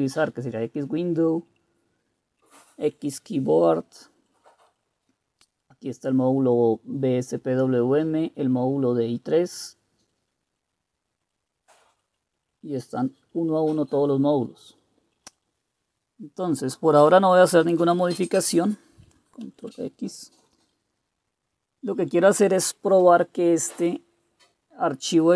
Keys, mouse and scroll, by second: 1.5 Down, 2.1 Down, 2.2 Down, 2.2 Down, 4.2 Page_Down, 4.7 Page_Down, 10.0 Page_Down, 10.4 Page_Down, 11.2 Page_Down, 11.9-12.3 Page_Down, 12.6 Page_Down, 12.9 Page_Down, 13.1 Page_Down, 13.3 Page_Down, 13.5 Page_Down, 13.7 Page_Down, 13.8 Page_Down, 14.2 Page_Down, 14.4 Page_Down, 15.0 Page_Down, 15.2 Page_Down, 19.4 super+x.